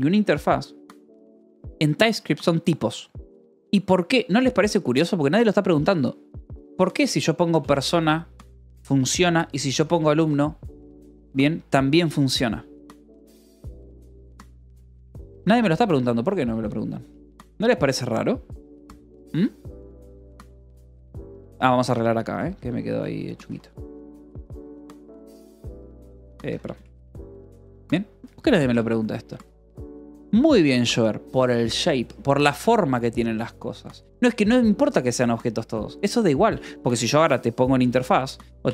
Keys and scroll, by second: 4.6 j, 5.5 k, 6.6-10.7 typing, 10.6 ctrl+s, 12.0 k, 12.6 k, 13.2 k, 13.9 k, 17.1 g, 17.5 j, 18.8 k, 19.5 j, 20.8 k, 22.7 0, 23.0 l, 23.6 c, 24.5 Escape, 25.1 r, 25.8 Escape, 26.3 r, 26.7 Escape, 28.1 k, 28.4 j, 29.0 k, 29.3 j, 36.6-38.7 typing, 38.1 Return.